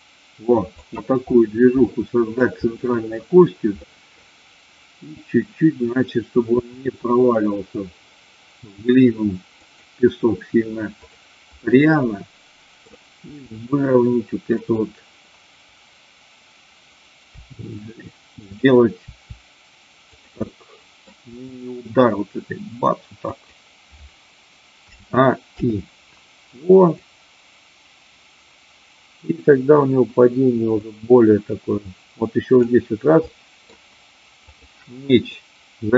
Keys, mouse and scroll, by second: 0.8 click, 1.8 middle click, 3.9 middle click, 6.6 r, 9.7 click, 12.0 middle click, 13.3 r, 14.6 click, 17.3 g, 18.4 click, 19.0 r, 20.2 click, 20.4-21.2 middle drag, 23.3 click, 25.6 i, 26.9-32.7 drag, 33.3 middle click, 34.4-35.6 drag, 35.6 middle click.